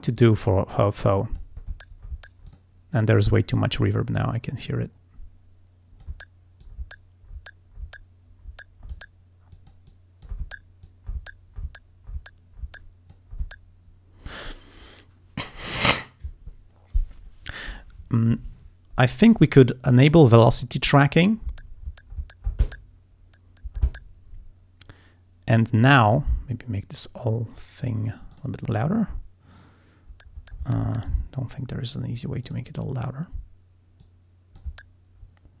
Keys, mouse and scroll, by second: 0.2 click, 0.4 click, 0.6 click, 2.5 click, 4.2-6.3 drag, 6.7-9.2 drag, 9.6 click, 10.9-13.4 drag, 20.3 click, 26.1 click, 28.4 click, 32.5 click, 34.1 click.